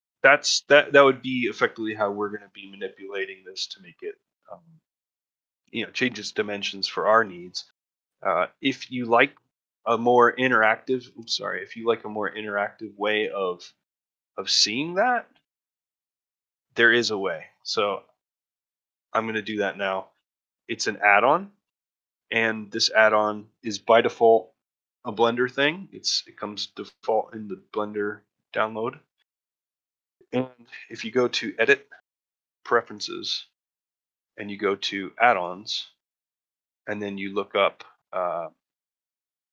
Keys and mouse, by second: 0.5 middle click, 0.9 middle click, 1.5 middle click, 2.9 middle click, 3.2 shift+middle click, 6.5 middle click, 6.9-8.4 ctrl+middle drag, 8.7 ctrl+middle click, 9.1 shift+middle click, 12.4 click, 12.9 middle click, 13.2 middle click, 16.5 middle click, 17.3-20.3 middle drag, 20.5 Tab, 21.1-21.9 ctrl+middle drag, 22.6 shift+middle drag, 26.7-28.4 drag.